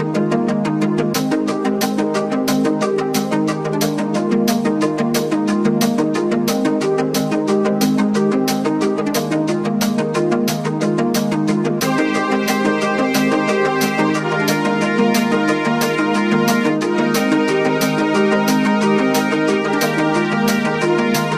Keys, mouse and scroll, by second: 2.7 alt+scroll up 1, 3.8-5.3 drag, 7.6-9.7 drag, 9.7 click, 10.1 typing, 10.5 alt+scroll up 1, 10.7-12.5 drag, 12.5-17.2 alt+shift+drag, 17.2-19.3 drag, 19.3-21.2 alt+drag.